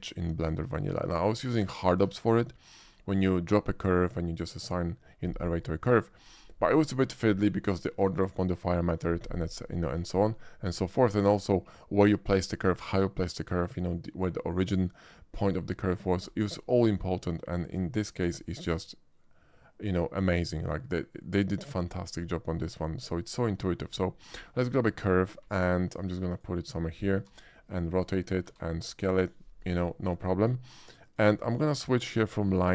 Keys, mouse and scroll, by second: 0.8 shift+middle drag, 1.3-1.7 shift+middle drag, 10.1 shift+middle click, 10.7 shift+middle drag, 11.1 shift+middle click, 16.2 middle drag, 17.5 shift+middle click, 18.2 shift+a, 23.8 click, 25.4 g, 26.3 click, 26.3 g, 27.2 r, 28.0 click, 28.4 s, 29.2 click, 29.9 shift+middle drag, 31.0 shift+click, 32.4 shift+click.